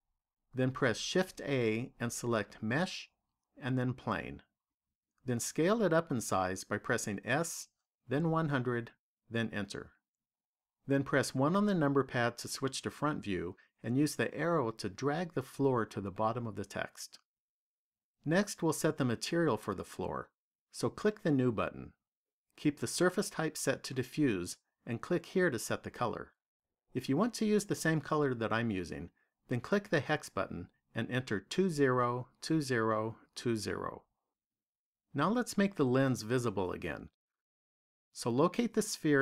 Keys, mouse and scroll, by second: 1.0 shift+a, 7.1 s, 11.2 KP_1, 13.5 click, 20.7 click, 25.1 click, 38.4 click.